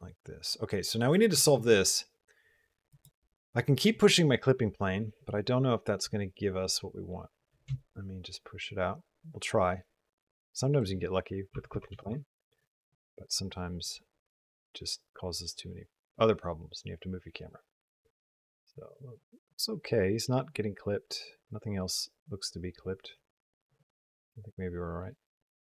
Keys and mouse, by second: 1.1 r, 7.7-10.5 shift+drag, 10.7-11.9 drag, 13.7-25.7 drag.